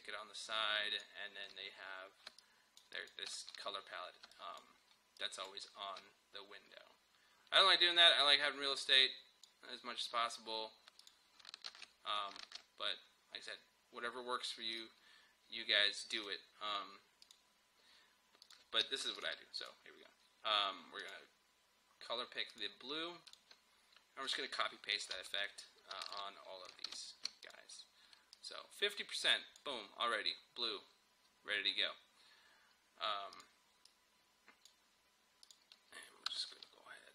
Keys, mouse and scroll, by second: 1.7-2.3 scroll up 1, 2.3 space, 2.4 click, 2.8 space, 3.0 click, 3.1 space, 3.5 scroll down 1, 4.3 click, 4.8 scroll up 1, 4.9 space, 5.7 scroll up 1, 5.8 space, 8.5-11.0 drag, 11.7 ctrl+w, 12.5 ctrl+w, 14.7 click, 14.8 click, 25.2 ctrl+c, 26.1 shift+click, 26.9 ctrl+v, 27.5-32.0 drag, 33.4-35.5 drag, 36.3 Return.